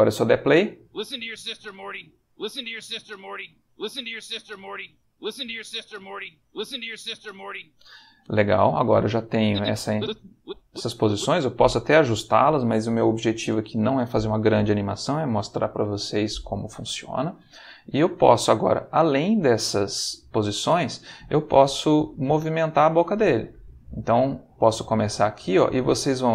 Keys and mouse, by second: 0.6 space, 7.8 space, 9.4-11.1 drag, 22.1 g, 24.0 space.